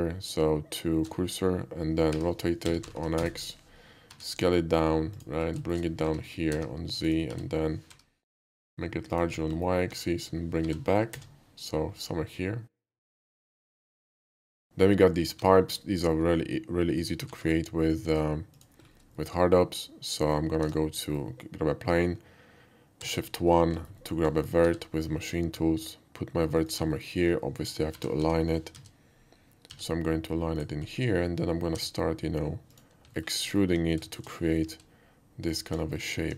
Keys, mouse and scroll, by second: 2.2 r, 2.7 x, 2.8 9, 3.0 0, 3.2 Return, 4.1 s, 5.2 click, 5.5 shift+middle click, 5.6 shift+middle click, 6.0 g, 6.5 z, 7.1 click, 7.3 s, 7.9 y, 9.2 click, 9.6 alt+middle click, 10.6 g, 11.1 c, 11.3 g, 13.4 click, 13.6 middle click, 13.9 shift+middle click, 15.5 alt+middle click, 16.9 alt+click, 17.3 shift+a, 18.5 click, 19.2 shift+middle click, 20.2 shift+middle click, 20.7 Tab, 21.0 middle click, 23.1 shift+1, 23.8 alt+shift+1, 23.8 middle click, 24.0 middle click, 24.6 g, 26.6 click, 26.9 alt+middle click, 27.9-29.7 typing, 30.6 click, 30.8 middle click, 31.7 e, 32.7 click, 33.1 alt+middle click, 33.5 alt+middle click, 34.2 shift+click, 34.6 e, 35.5 click, 35.7 x, 35.9 alt+middle click, 36.2 click.